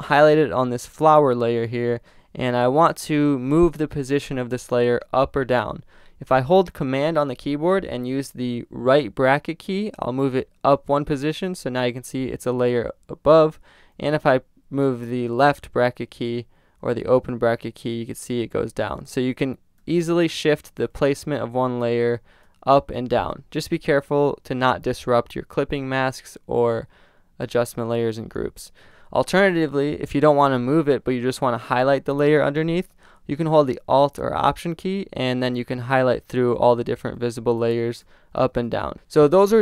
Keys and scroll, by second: 11.4 super+], 16.9 super+], 18.5 super+[, 20.1 super+], 20.7 super+[, 21.5 super+], 34.8 alt+[, 35.6 alt+], 36.9 alt+[, 37.2 alt+], 38.5 alt+[, 38.9 alt+].